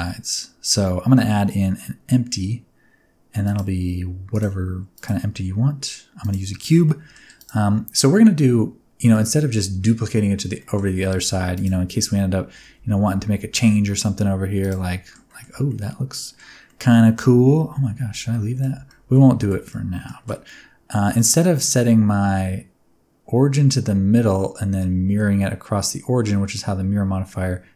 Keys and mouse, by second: 4.3 click, 6.2 click, 6.5 shift+middle click, 6.8 middle click, 7.3 click, 9.1 shift+middle click, 10.6 middle click, 10.9 Tab, 12.5 g, 12.7 x, 14.6 click, 14.8 middle click, 15.4 Tab, 15.6 middle click, 16.6 middle click, 17.3 ctrl+z, 17.8 ctrl+z, 18.3 middle click, 18.6 Tab, 18.8 middle click, 19.3 shift+middle click, 19.7 middle click.